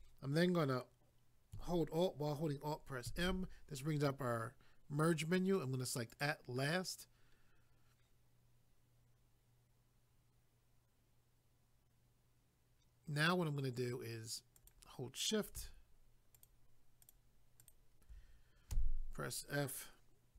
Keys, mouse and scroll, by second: 3.1 alt+m, 6.1 click, 14.6 click, 16.4 shift+click, 17.0 shift+click, 17.6 shift+click, 18.7 f.